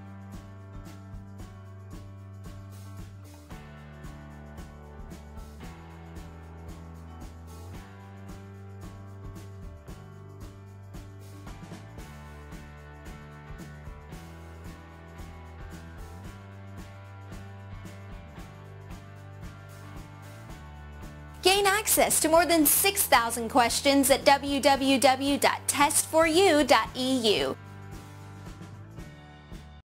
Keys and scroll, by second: 4.8 Tab.